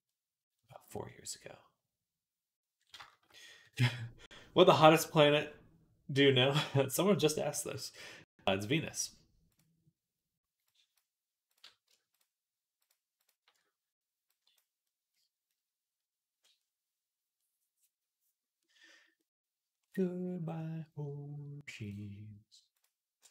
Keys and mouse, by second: 0.4 middle click, 0.4 click, 0.5-10.5 middle drag, 10.5 click, 11.4 middle click, 12.0 alt+shift+click, 12.7 alt+shift+middle click, 13.1 alt+shift+click, 13.3 shift+middle click, 14.2-22.7 drag, 22.7-23.3 middle drag, 23.1 g.